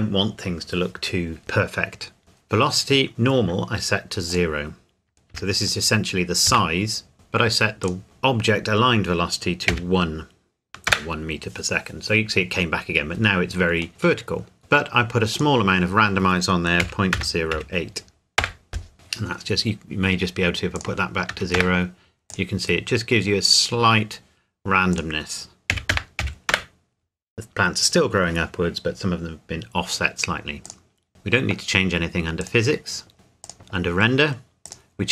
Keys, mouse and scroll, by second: 2.2 click, 4.3 click, 5.3 KP_0, 6.5 KP_Enter, 7.8 click, 9.7 KP_1, 10.9 KP_Enter, 13.9 middle click, 15.3 click, 16.8 KP_Decimal, 17.1 KP_0, 17.5 KP_8, 18.4 KP_Enter, 20.7 click, 21.3 KP_0, 21.5 KP_Enter, 22.3 click, 25.7 KP_Decimal, 25.9 KP_0, 26.2 KP_8, 26.5 KP_Enter, 29.0-29.6 scroll down 1, 30.6 click.